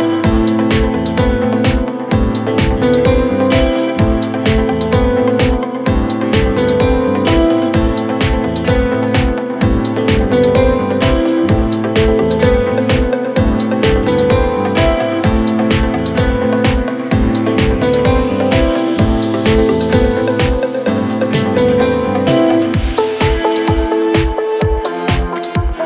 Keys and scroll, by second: 17.9 F9.